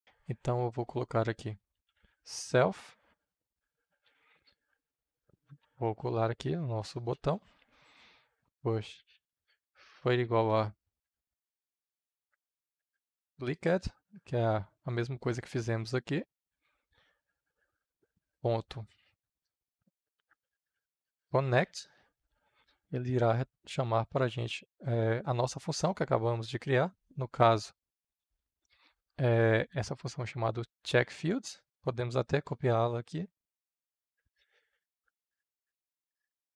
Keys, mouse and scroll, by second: 1.7 s, 2.0 l, 3.0 Return, 4.0 Right, 5.5 ctrl+v, 8.4 Right, 10.0-13.4 typing, 11.7 Return, 13.5 Return, 16.6-17.8 drag, 17.8 shift+., 19.9-21.3 typing, 21.5 Return, 22.5 shift+9, 26.9-31.7 drag, 32.2 ctrl+c, 33.6-36.5 drag.